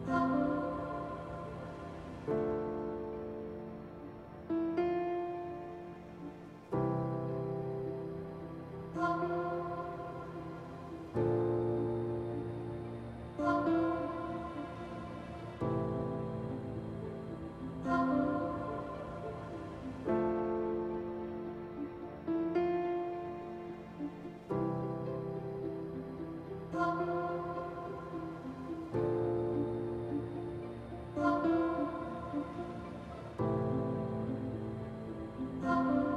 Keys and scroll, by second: 5.5 s, 19.3 ctrl+z, 26.1 f, 28.3 f.